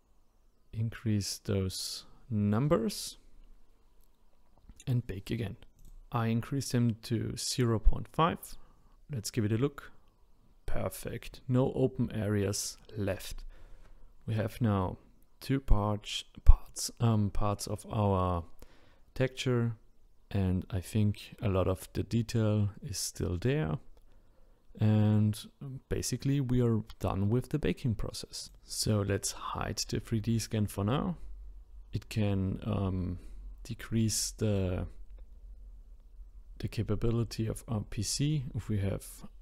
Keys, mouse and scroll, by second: 28.5-34.7 shift+middle drag, 35.6-39.4 middle drag.